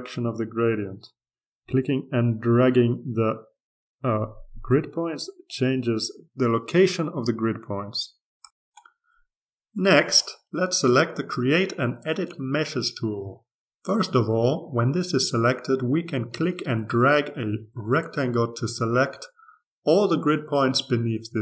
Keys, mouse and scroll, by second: 4.3-9.2 drag, 9.3-12.0 drag, 13.6 click, 18.0-20.3 drag.